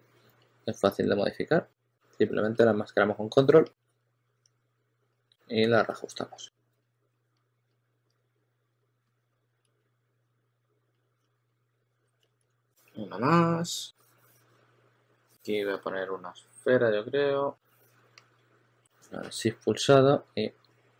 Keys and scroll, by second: 4.1-6.6 typing, 8.9-10.2 typing, 11.4-12.8 typing, 20.0 e.